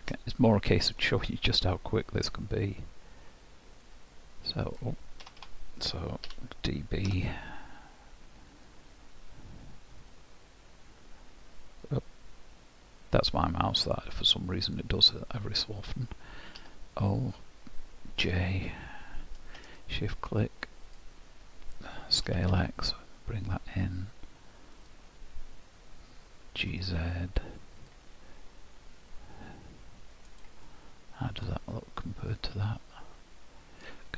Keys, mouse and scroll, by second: 0.3 middle click, 1.0 scroll down 1, 1.9-2.5 scroll up 1, 3.8 click, 6.3 d, 8.7 click, 11.2-11.7 scroll up 1, 22.3 s, 26.5 g, 29.2 scroll down 2, 30.3 click, 30.7 middle click, 31.7 scroll down 1, 32.3 middle click.